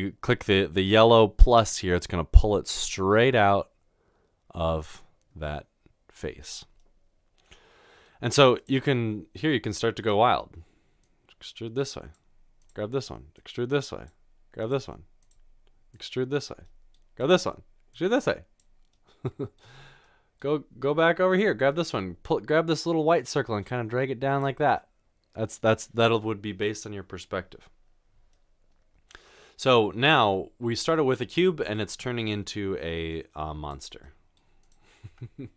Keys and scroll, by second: 35.1 g.